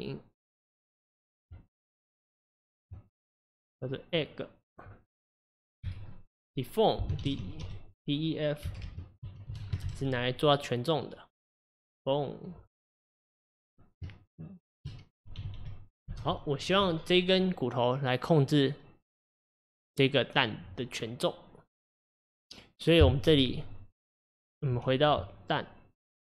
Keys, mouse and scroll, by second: 1.6 Tab, 3.3 click, 3.8 click, 5.9 F2, 8.9 BackSpace, 15.6 g, 25.2 Tab.